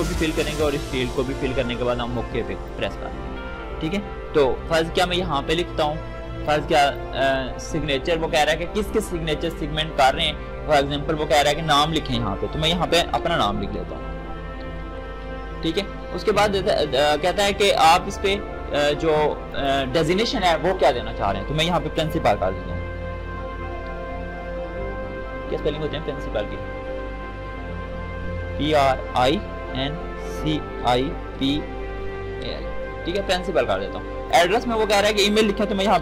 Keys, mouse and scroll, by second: 6.4-9.4 shift+drag, 11.5 shift+BackSpace, 12.9-15.3 typing, 19.5 click, 22.0 shift+p, 23.4-24.4 typing, 29.6-30.3 typing, 32.0-32.7 typing, 34.3 click, 35.6 typing.